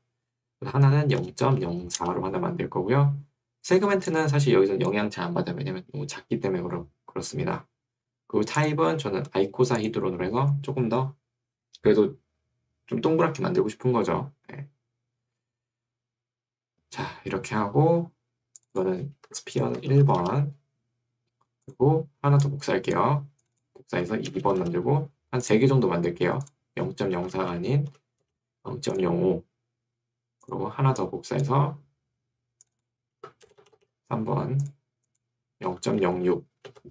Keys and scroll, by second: 0.8-2.3 typing, 5.2 Escape, 19.4 Right, 20.0 1, 20.2 Return, 24.0 Right, 24.4 BackSpace, 24.8 2, 27.2 Right, 27.4 Left, 28.2 BackSpace, 28.4 5, 33.2 Right, 33.4 BackSpace, 34.0 3, 35.8 Left, 36.8 BackSpace.